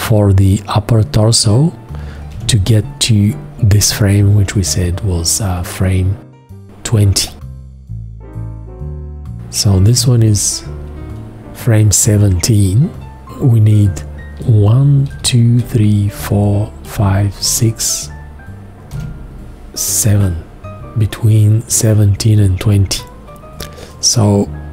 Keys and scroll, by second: 2.3 v, 3.8 F2, 9.9 v, 14.4-15.1 typing.